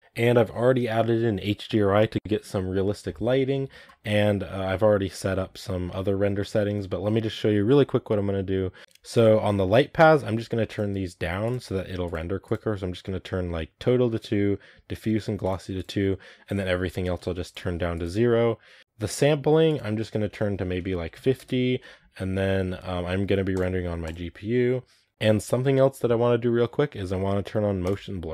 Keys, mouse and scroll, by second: 8.8-11.3 drag, 11.9 click, 15.6 click, 16.4-18.6 drag, 18.6 scroll down 3, 19.5-28.3 drag.